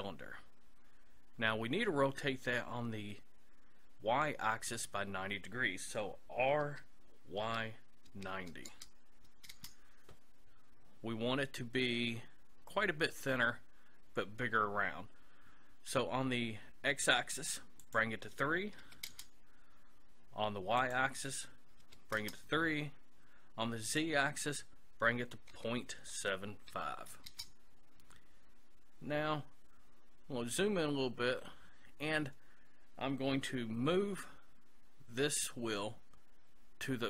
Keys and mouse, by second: 6.6 r, 17.8-19.6 drag, 20.8-22.6 drag, 23.9-25.7 drag, 30.5-33.3 middle drag.